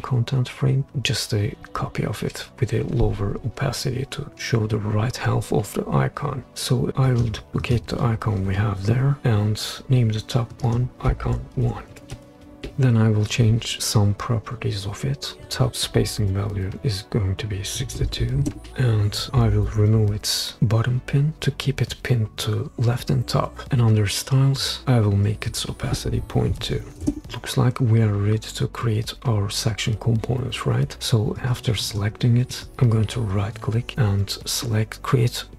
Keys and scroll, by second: 9.0 super+d, 11.6-12.6 typing, 17.8 typing, 18.4 Return, 26.5-26.9 typing, 27.0 Return.